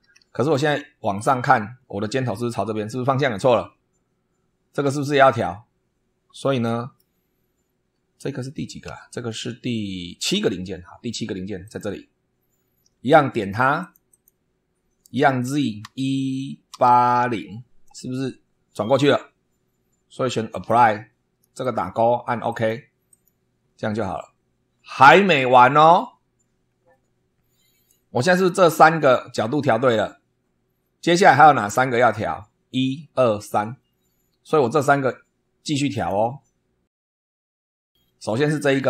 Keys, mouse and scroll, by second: 1.1 click, 1.7 scroll down 2, 6.3-7.1 middle drag, 10.3 super+2, 11.6 click, 13.3 click, 13.7 click, 15.1 click, 15.8 1, 16.7 8, 17.1 0, 20.5 click, 21.5 click, 22.4 click, 23.0 click, 26.3-26.8 scroll down 4, 32.0 scroll down 2, 35.9 click.